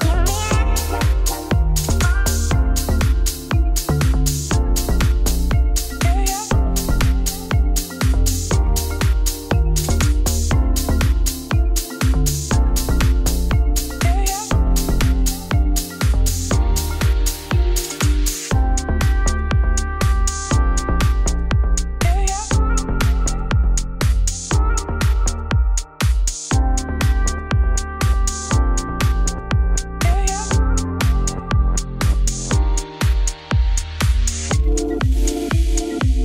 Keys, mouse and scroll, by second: 0.1 alt+click, 0.6 g, 1.8 shift+middle click, 2.7 scroll down 1, 2.9-4.1 middle drag, 4.4 shift+middle click, 4.6 scroll down 1, 4.8 shift+middle click, 5.1 scroll up 3, 5.3-6.4 middle drag, 6.4 alt+click, 7.4 middle click, 8.2 scroll down 3, 8.7 shift+middle click, 8.8 z, 9.7-10.9 middle drag, 11.9-13.1 drag, 13.2-14.3 drag, 14.3 scroll down 1, 14.4 middle click, 14.7 click, 15.4 click, 15.9 right click, 16.6 click, 17.3 middle click, 17.7 scroll up 1, 18.1 click, 18.8 middle click, 20.0 click, 21.8 click, 22.9 click, 23.2-27.7 shift+drag, 28.5-29.7 drag, 29.8-31.9 drag, 32.0-34.2 drag, 34.3-35.5 drag, 35.6 click.